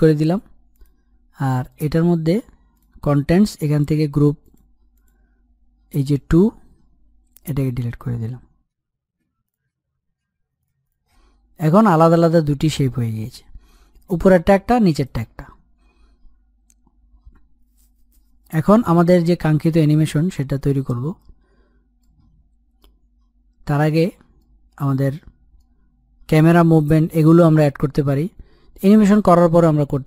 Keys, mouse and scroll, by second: 0.4 click, 7.0 Delete, 9.3 click, 10.6 click, 11.1 click, 20.8-21.7 scroll down 1, 21.7-23.6 middle drag, 23.6 scroll up 1, 24.1-25.6 middle drag, 25.6-27.1 scroll down 1, 28.6-29.0 scroll up 1, 29.0-30.0 middle drag.